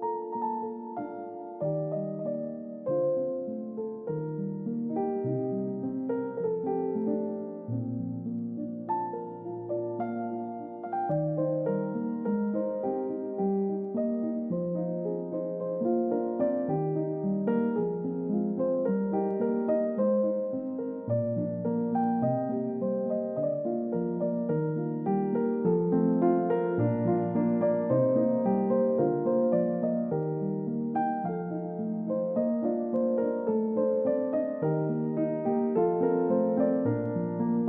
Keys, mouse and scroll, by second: 0.0 middle click, 1.9 scroll up 1, 2.7 middle click, 3.4 scroll down 1, 3.6 middle click, 3.9 scroll up 1, 4.2 middle click, 4.8 ctrl+s, 5.8 scroll up 1, 7.1 middle click, 8.5-8.8 scroll down 1, 8.8 middle click, 9.2-10.5 scroll up 1, 15.9-16.5 scroll down 1, 16.5 middle click, 21.5 ctrl+d, 24.0 double click, 24.3 scroll up 1, 25.0 scroll down 1, 26.9 middle click, 28.0 space, 29.9-30.8 scroll up 1, 34.3 middle click.